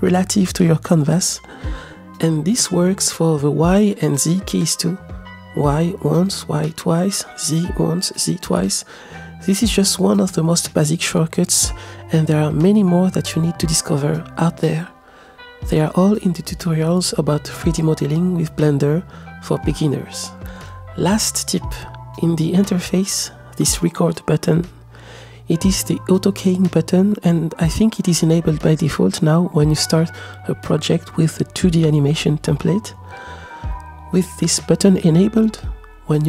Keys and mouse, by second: 4.7 y, 5.7 y, 7.6 g, 9.8 click, 9.9 middle click, 12.2-13.1 middle drag, 13.8 click, 13.9-20.0 middle drag, 23.8 click, 24.3 click, 25.5 click, 26.0 middle click, 30.1 click, 31.8 click, 32.0 middle click, 32.0 click, 33.2 shift+middle click, 33.4 shift+click, 33.8 shift+middle click, 35.9-36.2 drag.